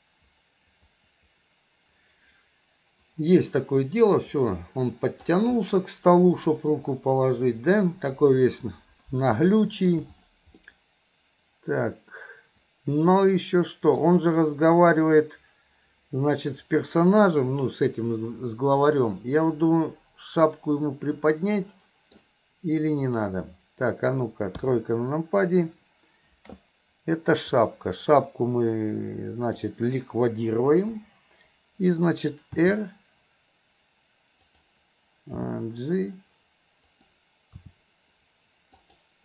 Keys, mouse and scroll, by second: 5.6-6.5 middle drag, 7.4-8.2 middle drag, 9.6-10.0 middle drag, 10.7-14.1 middle drag, 18.9-22.2 middle drag, 23.1 click, 27.6-29.7 drag, 30.8 Delete, 32.7 r, 35.4 g, 37.6 r.